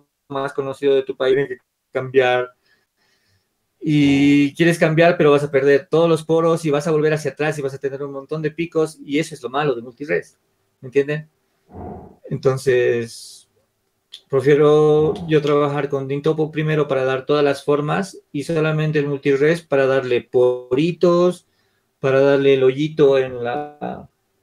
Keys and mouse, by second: 5.7-7.0 middle drag.